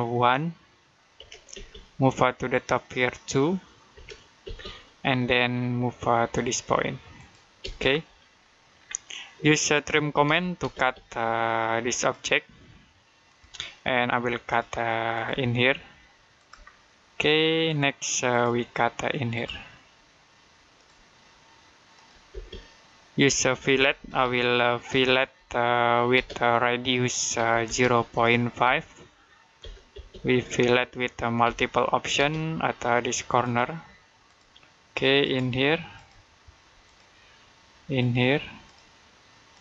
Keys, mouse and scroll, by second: 1.0 middle click, 1.1 1, 1.4 space, 3.8 2, 4.3 space, 5.0 middle click, 7.0 click, 7.4 space, 7.7 scroll down 1, 8.2 middle click, 8.7 scroll up 1, 9.0 middle click, 9.7-10.6 typing, 11.8 click, 22.2 space, 23.3-24.7 typing, 26.0 space, 27.2-28.0 typing, 29.2-29.9 typing, 31.3 m, 32.0 space, 33.2 click.